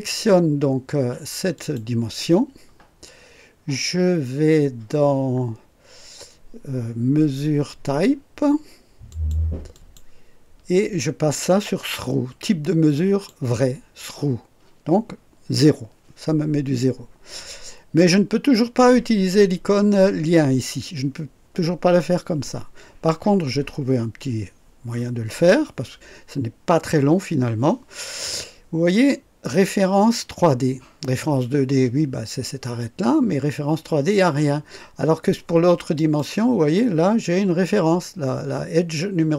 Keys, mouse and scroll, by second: 1.5 click, 4.8 scroll up 1, 9.1 click, 9.7 click, 12.8 click, 35.9 click.